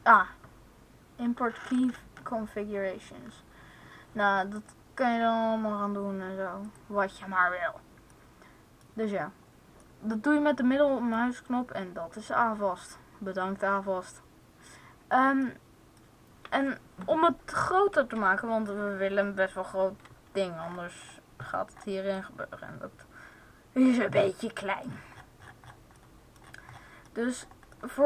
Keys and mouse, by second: 8.3-15.7 middle drag, 22.9-24.0 middle drag, 24.3 middle click, 25.1-28.0 middle drag.